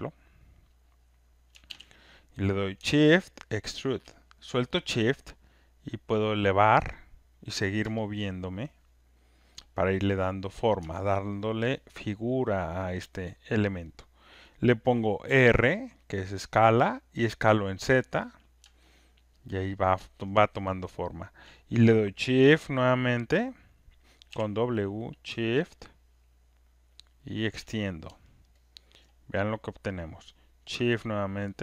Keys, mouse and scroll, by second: 1.2 click, 1.6 z, 2.7 z, 4.0 shift+click, 6.5 click, 9.3 alt+click, 10.6 click, 11.3 alt+right click, 11.9 alt+middle click, 12.0 alt+click, 12.5 alt+click, 12.5 alt+right click, 12.7 alt+middle click, 13.3 alt+click, 15.2 alt+click, 17.6 click, 18.6 r, 20.0 alt+click, 20.4 alt+middle click, 21.4 alt+click, 25.1 alt+right click, 27.5 shift+click, 28.4 alt+right click, 28.9 alt+click, 30.1 click, 31.4 alt+middle click.